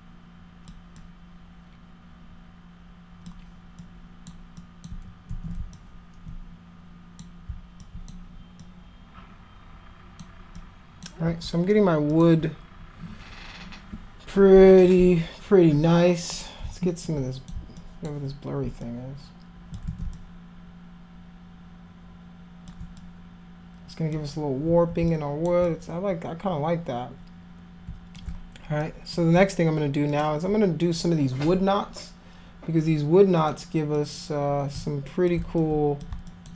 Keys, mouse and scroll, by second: 1.0-3.3 alt+drag, 3.8 alt+click, 4.6 alt+click, 5.3 ctrl+z, 5.7-7.2 alt+drag, 7.8 alt+click, 8.6-10.2 drag, 10.6 click, 12.1 click, 16.3 click, 17.0 alt+click, 17.8 alt+click, 18.8 click, 19.9 ctrl+z, 20.1-22.7 alt+drag, 23.0-24.2 drag, 25.1 alt+click, 25.7-28.2 drag, 28.8 alt+click, 30.1 click, 33.4 click, 34.0-35.3 drag, 35.6 alt+click, 36.3 alt+click.